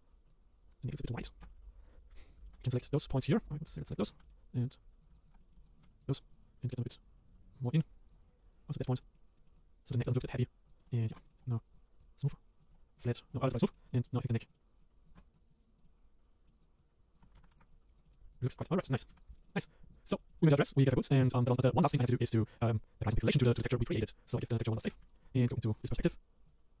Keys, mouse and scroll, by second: 0.3 click, 0.4 scroll up 1, 0.5 scroll down 2, 0.7 scroll up 1, 0.8 click, 1.2 click, 1.4 Tab, 1.5 scroll up 1, 1.7 scroll down 5, 2.3 click, 2.6 middle click, 2.9 shift+click, 3.2 shift+click, 3.4 shift+click, 3.5 middle click, 4.1 shift+click, 4.2 middle click, 4.5 click, 4.6 click, 5.0 click, 5.1 shift+click, 5.2 shift+click, 5.4 middle click, 5.6 shift+click, 5.8 shift+click, 5.8 middle click, 6.3 click, 6.4 scroll up 2, 6.7 click, 8.1 click, 8.3 click, 8.9-9.3 scroll down 3, 9.0 middle click, 9.3 middle click, 9.5 click, 9.9 middle click, 10.4 scroll up 4, 10.7 click, 10.8 middle click, 10.9 scroll down 1, 11.0 middle click, 11.1 Tab, 11.2 middle click, 11.7 right click, 12.0 click, 12.6 click, 13.0 right click, 13.7 middle click, 13.7 click, 13.8 middle click, 13.9 scroll down 1, 14.0 middle click, 14.1 scroll up 2, 14.3 middle click, 14.9 scroll up 1, 15.0 click, 15.1 Tab, 15.3 click, 15.5 click, 15.8 middle click, 16.6 click, 16.8 click, 17.3 ctrl+z, 17.5 shift+click, 18.0 middle click, 18.2-19.1 scroll down 4, 18.3 click, 18.4 middle click, 18.6 Tab, 18.7 shift+middle click, 19.1 shift+middle click, 19.4 click, 19.6 middle click, 19.6 click, 20.1-23.9 middle drag, 23.9 click, 24.5 click, 24.8 middle click, 24.9 scroll down 4, 25.1 shift+middle click, 25.4 click, 25.6-26.8 middle drag.